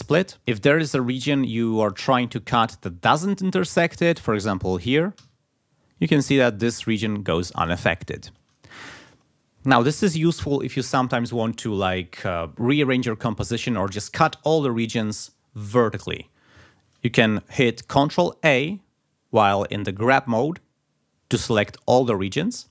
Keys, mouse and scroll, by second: 0.9 ctrl+click, 1.5 ctrl+scroll up 2, 2.3 ctrl+click, 3.2 ctrl+scroll down 2, 3.6 ctrl+scroll up 2, 5.1 s, 6.1 click, 6.8 ctrl+scroll down 2, 8.3 ctrl+z, 9.7 ctrl+scroll down 2, 18.5 ctrl+a.